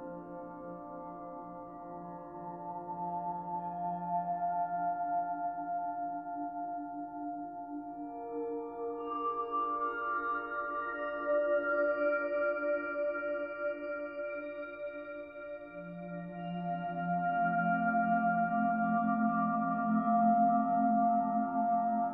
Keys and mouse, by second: 0.7-2.6 drag, 3.7-5.2 drag, 8.7 click, 11.5 click, 12.9 click, 16.8 click, 18.6 click, 19.7 ctrl+alt+click, 20.5-21.5 alt+drag.